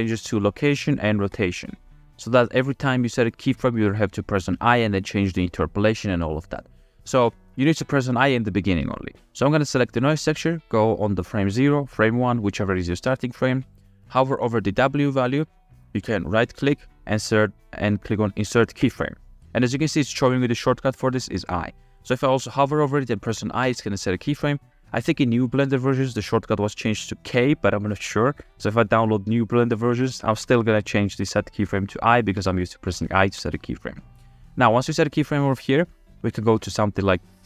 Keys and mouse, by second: 2.7-3.2 middle drag, 4.1-7.6 middle drag, 11.0 click, 16.6-19.4 drag, 20.1-21.9 drag, 23.9-37.4 middle drag.